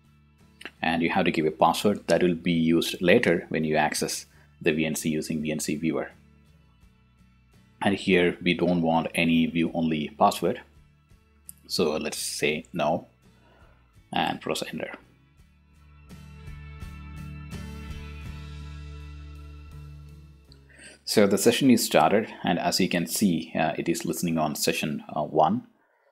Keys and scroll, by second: 2.6-4.9 typing, 3.9 ctrl+u, 5.1 Return, 6.2 t, 6.3 o, 6.4 s, 6.7 Return, 8.2 y, 14.0 BackSpace, 15.6 n, 16.5 Return.